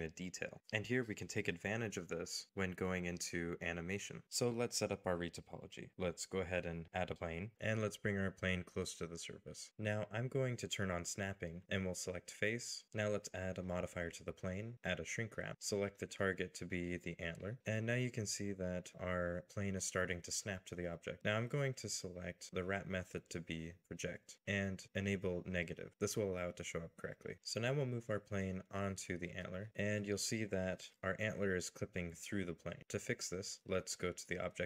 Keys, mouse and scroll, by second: 0.1 shift+middle click, 0.6 scroll down 1, 1.4 shift+middle click, 2.0 scroll down 1, 7.1 scroll down 1, 7.7 middle click, 7.8 g, 8.6 scroll up 1, 9.1 scroll down 1, 9.2 middle click, 18.9 middle click, 19.8 scroll up 1, 20.5 shift+middle click, 27.1 scroll down 1, 27.7 g, 28.7 middle click, 29.7 g, 30.0 middle click, 30.6-31.5 scroll up 1, 31.5 g, 32.6 g, 32.8 shift+scroll up 1.